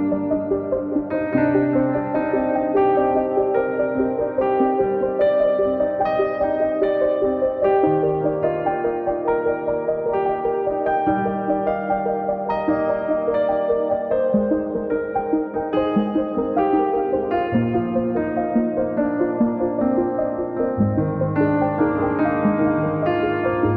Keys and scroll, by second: 0.4 Return, 3.6 space, 4.0 Escape, 11.3 space, 12.2 Delete, 18.1 p, 19.0 space, 19.7 Escape, 20.5 a.